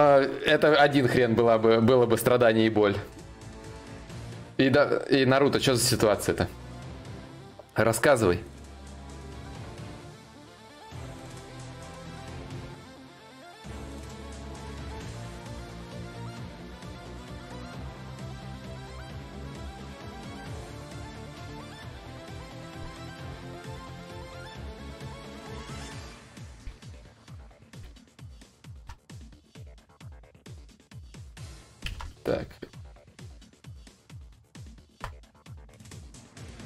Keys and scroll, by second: 28.3 ctrl+z, 31.5 ctrl+z, 34.5 ctrl+z.